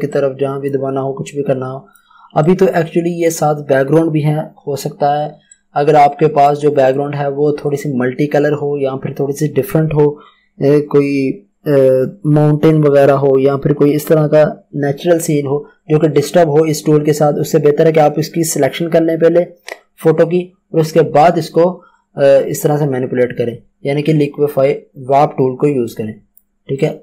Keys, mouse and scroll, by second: 5.5 click, 7.3 ctrl+z, 25.8 z, 26.1 click.